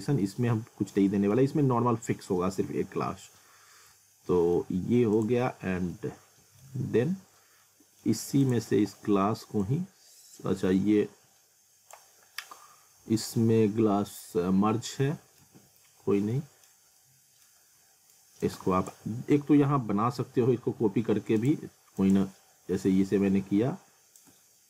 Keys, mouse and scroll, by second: 3.9 alt+middle click, 5.2 click, 5.5 scroll down 1, 5.9 alt+middle click, 7.4 scroll up 1, 7.6 alt+middle click, 8.4 click, 15.4 ctrl+z, 16.1 scroll down 1, 16.3 middle click, 17.0 alt+middle click, 18.4 shift+click, 21.4 click, 24.2 shift+click.